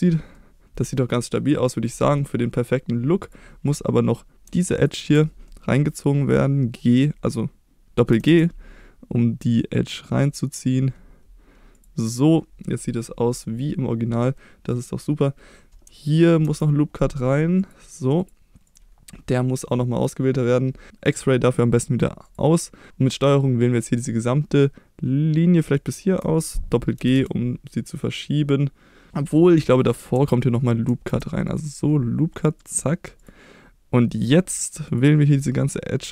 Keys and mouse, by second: 0.3 middle click, 1.0 middle click, 1.7 middle click, 3.2 click, 4.8 ctrl+click, 5.5 middle click, 8.1 g, 8.4 g, 11.7 click, 12.1 middle click, 13.0 middle click, 14.4 middle click, 16.4 ctrl+r, 18.2 click, 22.2 click, 25.8 ctrl+click, 27.0 g, 27.2 g, 30.9 ctrl+r, 32.6 click, 33.2 click.